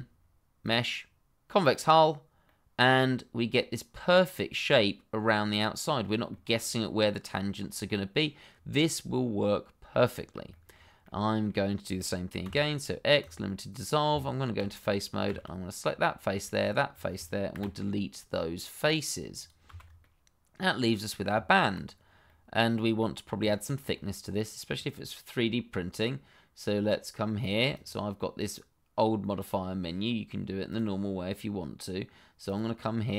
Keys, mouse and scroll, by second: 0.6 click, 2.4 middle click, 6.3 shift+middle click, 6.3 middle click, 6.5-7.0 scroll up 1, 7.9 middle click, 8.5-8.8 scroll down 1, 8.8 middle click, 10.1-10.5 scroll up 1, 10.5 shift+middle click, 11.0 middle click, 12.4 x, 13.2 click, 14.1 Tab, 14.8 click, 15.2 shift+z, 15.8 middle click, 16.6 shift+click, 17.5 Delete, 19.4 click, 19.6 shift+z, 20.0 middle click, 21.3 Tab, 21.9-22.2 scroll down 1, 22.2 middle click, 23.2-23.5 scroll up 1, 23.5 shift+middle click, 23.9 middle click, 27.7 click, 31.0 click.